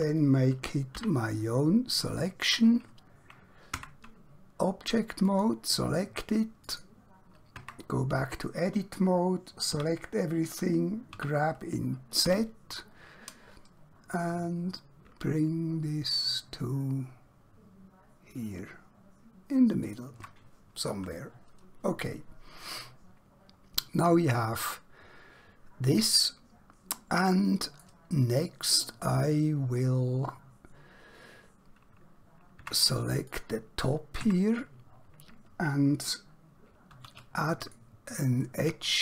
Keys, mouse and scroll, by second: 1.0 p, 2.0 click, 3.8 Tab, 5.4 click, 7.6 Tab, 11.2 typing, 12.2 typing, 19.8 shift+click, 20.9 click, 22.8 middle click, 32.6 Tab, 33.3 click, 34.3 Tab, 37.0 alt+q, 37.6 click, 38.4 right click.